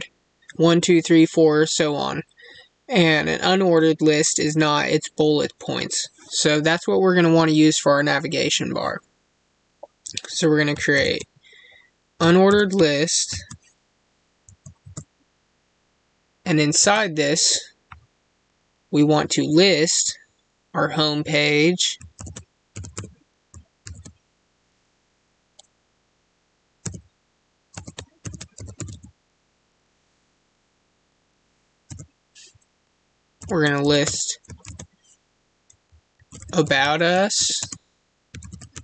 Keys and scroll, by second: 37.5 space.